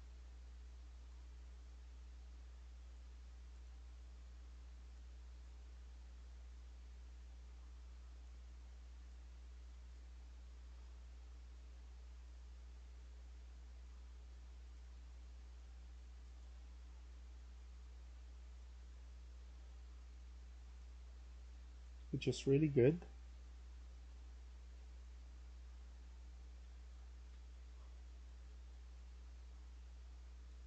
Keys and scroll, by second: 20.4-25.1 typing, 26.1-28.8 typing.